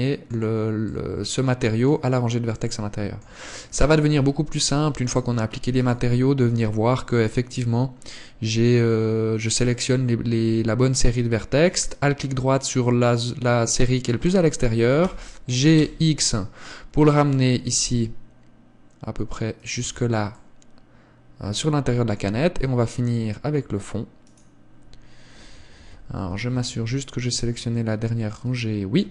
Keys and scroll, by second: 4.4 Tab, 15.3 g, 20.2 Tab, 22.6 Tab, 26.4 KP_1, 27.0 z, 28.8 z.